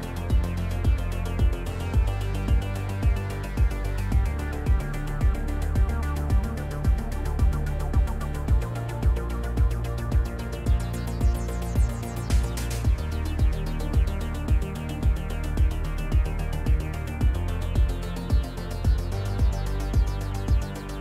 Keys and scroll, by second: 6.6 m, 10.5 ctrl+z, 10.8 ctrl+z, 11.7 v, 14.6 shift+f.